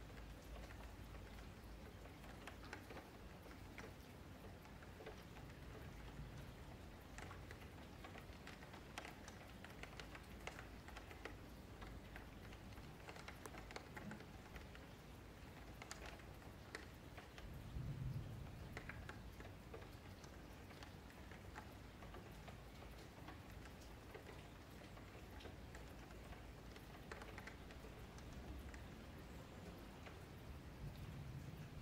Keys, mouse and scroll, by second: 1.7 s, 3.1 middle click, 3.7 scroll down 3, 3.9 middle click, 4.8 Tab, 5.0 scroll down 1, 5.1-6.1 scroll up 5, 5.5 shift+middle click, 6.1 click, 8.0 shift+d, 8.8 s, 9.6 Tab, 9.8 a, 10.3 s, 16.3 click, 18.3 middle click, 18.6 Tab, 19.4 click, 20.7 KP_Divide, 21.2 scroll up 4, 21.5 middle click, 21.7 Tab, 23.3 2, 23.6 alt+click, 24.0 alt+shift+click, 24.6 alt+shift+click, 25.2 alt+shift+click, 25.5 alt+shift+click, 26.1 alt+shift+click, 26.5 ctrl+x, 27.4 alt+click, 28.3 ctrl+x, 29.2 click, 29.5 ctrl+x, 29.8-31.1 middle drag, 31.1 Tab.